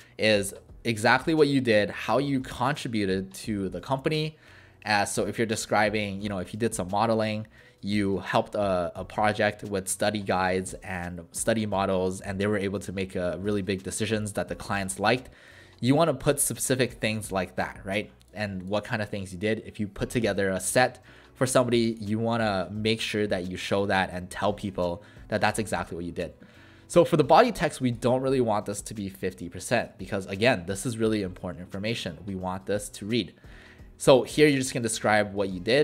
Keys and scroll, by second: 28.8-29.9 typing, 31.6 w.